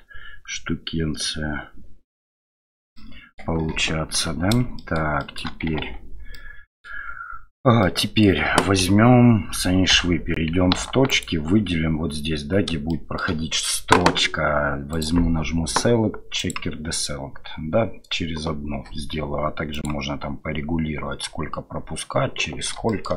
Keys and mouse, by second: 3.0-3.4 middle drag, 3.7 KP_7, 4.8 shift+middle click, 5.2 shift+middle click, 5.8 Tab, 6.3 middle click, 7.8 middle click, 8.8 KP_7, 9.9 1, 11.1 alt+click, 12.9 shift+middle click, 14.9-22.8 middle drag, 22.9 shift+middle click.